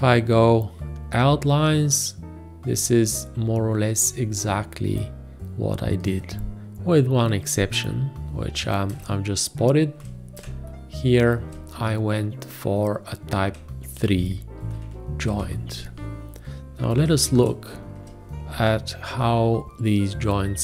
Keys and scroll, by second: 9.0 ctrl+space, 14.0 ctrl+a, 15.4 ctrl+space, 16.3 ctrl+space.